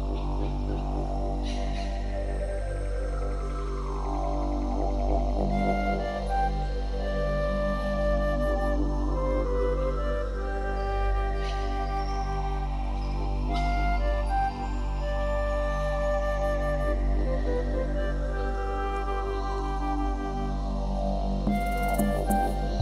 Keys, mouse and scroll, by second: 0.3 click, 1.5 c, 7.6 right click, 7.7 middle click, 10.0 z, 10.2 middle click, 11.7 middle click, 13.2 shift+click, 13.5 middle click, 18.2 z, 18.5 middle click, 19.4 i.